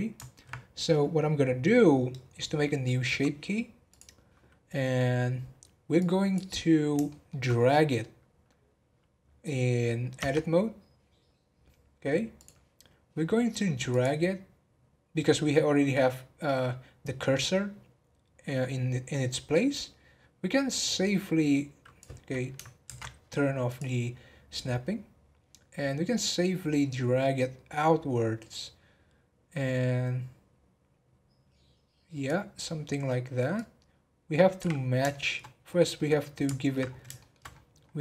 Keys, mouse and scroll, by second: 3.9-6.7 drag, 6.7-7.1 scroll down 3, 7.1 shift+middle click, 7.5 scroll up 2, 10.2 Tab, 12.4 click, 13.9-17.0 drag, 20.8 click, 22.8 ctrl+z, 23.6 click, 24.3 scroll up 2, 26.3 click, 34.8 scroll up 2, 35.1 middle click, 35.6 scroll down 6, 35.9 middle click, 36.8 scroll up 4, 37.1 shift+middle click, 37.5-37.9 scroll up 6.